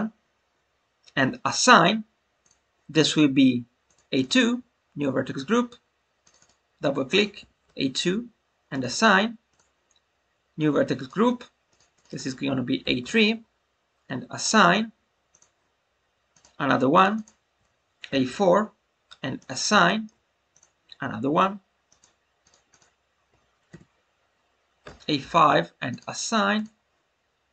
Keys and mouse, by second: 2.3-6.3 drag, 6.5-8.2 drag, 9.4 click, 11.6 click, 11.9 click, 12.0-13.7 drag, 14.3-16.4 drag, 16.9 click, 17.2-19.0 drag, 19.8 shift+middle click, 22.4 click, 22.6-25.5 drag, 26.5-27.5 drag.